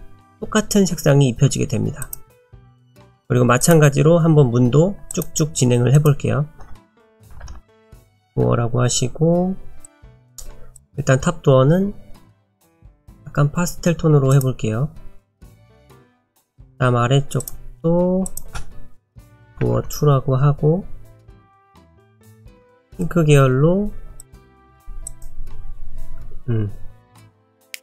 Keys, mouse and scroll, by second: 2.0 click, 3.6 click, 6.0 click, 7.5 o, 9.8 click, 16.3 click, 17.4 click, 19.3 o, 21.7 click, 27.7 click.